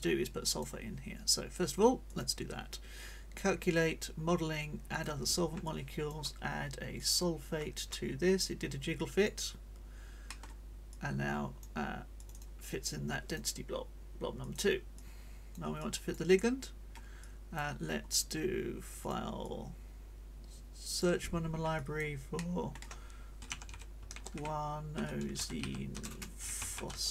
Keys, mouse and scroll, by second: 2.1 click, 4.9 click, 5.6 click, 7.0 click, 7.6 click, 8.4 click, 9.0 middle click, 10.3 middle click, 10.9 click, 12.2 click, 14.4 click, 15.0-16.3 drag, 16.4-17.0 scroll up 1, 17.2 click, 17.9 scroll up 1, 19.0 click, 19.4-21.2 drag, 21.8 click, 22.3 click, 23.2-27.1 typing.